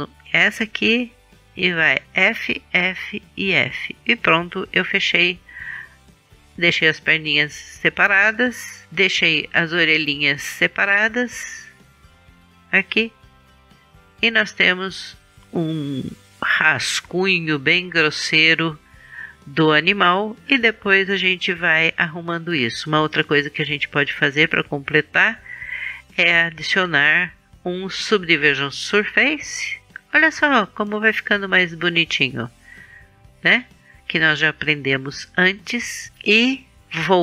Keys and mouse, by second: 1.6 f, 2.5 f, 3.1 f, 4.2 middle click, 9.1 KP_1, 14.2-17.7 middle drag, 19.6-23.0 middle drag, 23.0 KP_1, 28.3-32.3 middle drag, 34.3-36.1 middle drag.